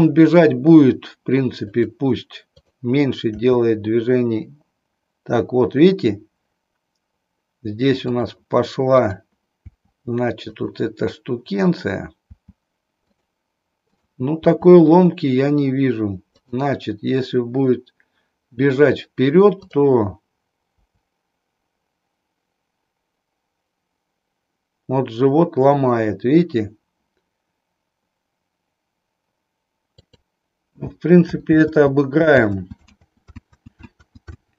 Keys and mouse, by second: 2.5 click, 3.4 r, 8.0 click, 9.8 r, 12.3 r, 13.9 click, 16.4 click, 19.5 click, 20.8 r, 30.2 click, 31.4 ctrl+z, 33.3 ctrl+z.